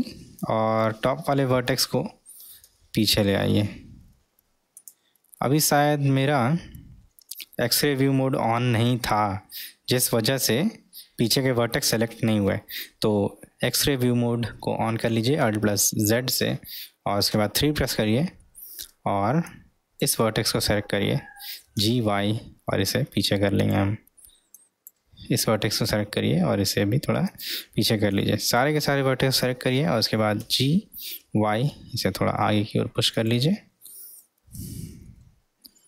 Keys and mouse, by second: 0.5 click, 2.5 g, 5.3-7.4 middle drag, 8.7-11.9 middle drag, 15.7 alt+z, 18.4-18.8 middle drag, 19.5 click, 21.5 g, 24.6 click, 25.8 g, 28.2 click, 30.4 g, 35.1-35.6 alt+middle drag.